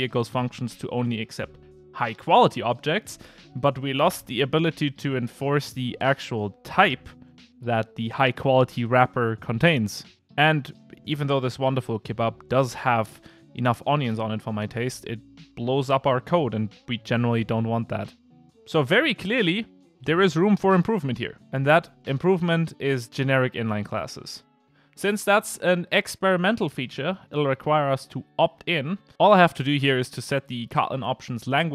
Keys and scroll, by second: 24.8 super+1.